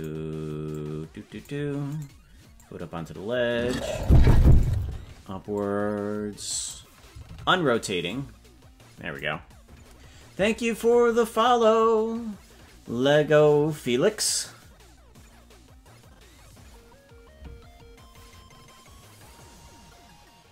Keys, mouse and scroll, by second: 0.7 click, 2.0 right click, 2.5-4.0 drag, 4.6 right click, 5.5-6.7 drag, 7.3 alt+r, 8.0-9.2 drag.